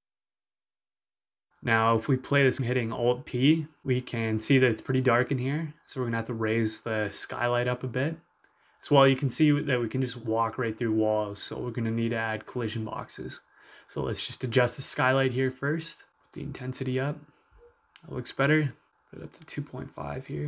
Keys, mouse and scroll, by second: 0.2-2.5 drag, 3.4-11.2 right drag, 3.7 w, 7.9 space, 9.1 s, 10.4 w, 11.5 s, 11.9 y, 14.5 click, 17.5 Return, 17.9-18.9 right drag, 18.1-19.8 typing, 20.4 Return.